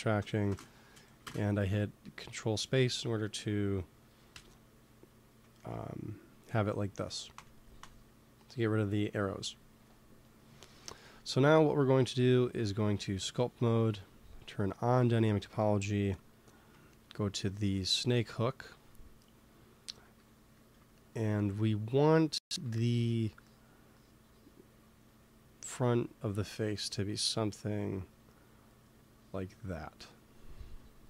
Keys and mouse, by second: 0.4 ctrl+space, 1.1 ctrl+space, 4.2 KP_1, 7.2 Tab, 7.7 Tab, 11.9-13.8 drag, 13.5 t, 14.4-17.0 drag, 17.0-19.0 middle drag, 20.1 f, 22.4 f, 22.6-25.0 drag.